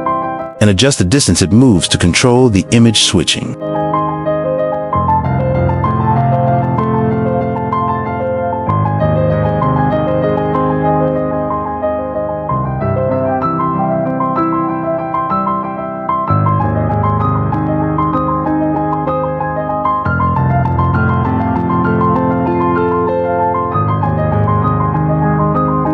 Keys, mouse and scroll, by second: 2.3-2.6 shift+middle drag, 3.0 middle click, 3.3 shift+middle drag, 3.6 g, 4.5 shift+middle drag, 4.7 g, 14.5-14.8 shift+middle drag, 15.1 shift+middle drag, 15.9 g, 20.8 q, 21.2 click, 21.6 Tab, 22.3 shift+middle click.